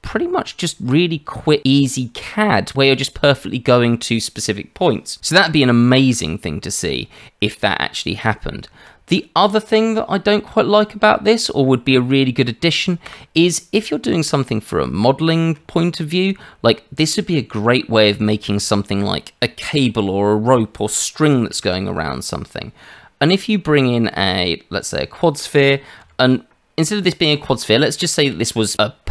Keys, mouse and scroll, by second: 8.3 Tab, 9.2 scroll down 2, 13.0 Delete, 13.7-14.0 scroll down 2, 14.0 middle click, 14.8-15.1 scroll up 1, 15.2 shift+middle click, 15.5 scroll up 1, 21.5 shift+a, 27.5-27.9 scroll up 2, 28.0 shift+middle click.